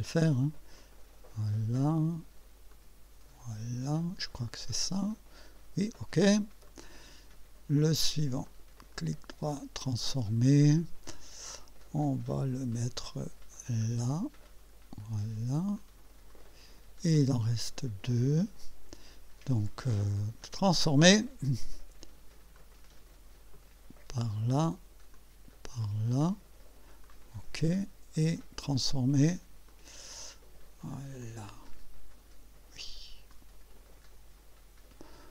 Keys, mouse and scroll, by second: 0.8-1.9 drag, 2.7-4.3 drag, 4.4-6.0 drag, 6.7 click, 8.5 click, 8.9 right click, 9.9 click, 11.1-12.7 drag, 13.5-15.0 drag, 15.8 click, 16.3 click, 17.8 click, 20.4 right click, 21.0 click, 22.6-24.4 drag, 25.1-26.4 drag, 27.1 click, 28.4 click, 28.8 right click, 29.7 click, 31.2-32.5 drag, 33.3-34.6 drag.